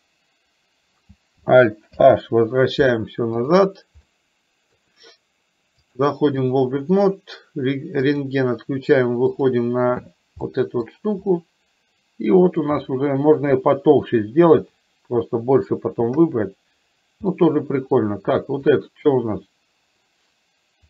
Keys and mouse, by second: 2.0 alt+h, 3.5 click, 4.1 middle click, 6.0 click, 10.6 middle click, 11.3-12.6 middle drag, 14.6 KP_3, 16.2 KP_1, 17.3-18.0 middle drag, 18.7 click.